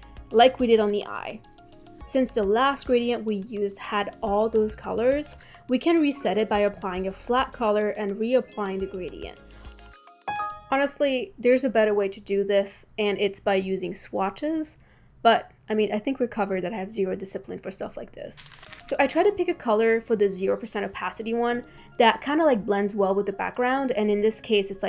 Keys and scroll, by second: 6.2 v.